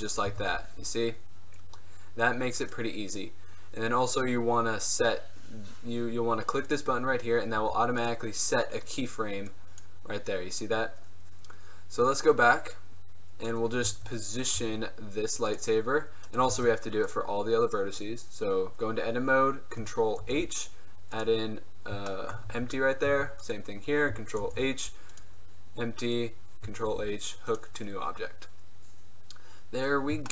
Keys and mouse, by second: 0.4 z, 0.7 g, 7.7 g, 13.9 z, 14.7 g, 15.6-16.4 drag, 16.4 right click, 16.7 Tab, 18.9 middle click, 20.3 ctrl+h, 21.7 middle click, 22.3 click, 22.6 Tab, 23.2 Tab, 24.5 ctrl+h, 27.0 ctrl+h.